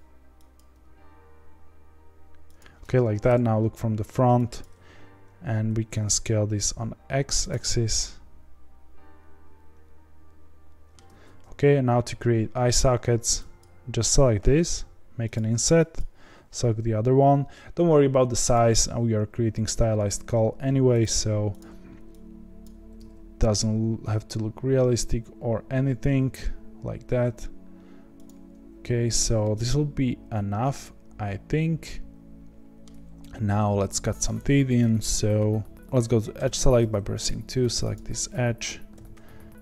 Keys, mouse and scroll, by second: 0.5 click, 0.7 g, 3.2 KP_1, 4.6 click, 5.7 s, 7.6-10.6 middle drag, 10.9 scroll down 1, 11.0 z, 12.8 3, 13.6 click, 14.5 i, 15.9 click, 16.6 i, 19.5 s, 21.1 s, 22.6 click, 22.9 s, 29.4-32.5 middle drag, 32.8 scroll down 1, 33.2-35.7 scroll up 3, 35.7 middle click, 36.3 2, 37.2 click, 37.9 click, 38.9 ctrl+b.